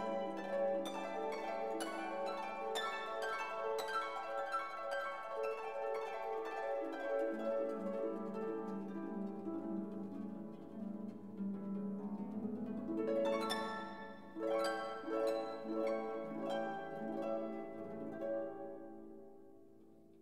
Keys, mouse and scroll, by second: 0.0 click, 0.6-1.7 typing, 3.7 click, 4.5 4, 4.9 0, 5.5 click, 6.1-6.4 scroll down 2, 6.6 scroll down 2, 7.1 scroll up 2, 8.4 click, 10.0 click, 10.9 2, 11.4 0, 12.4-13.6 drag, 14.4-15.8 drag, 16.3 click, 17.1 click, 18.6 click, 19.6 click.